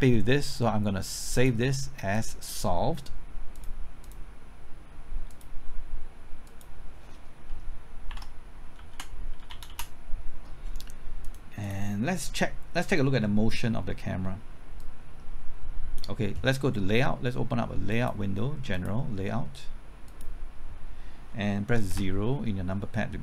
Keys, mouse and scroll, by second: 1.3 click, 8.0-10.1 typing, 11.2-16.6 drag, 11.2 d, 21.8 KP_0.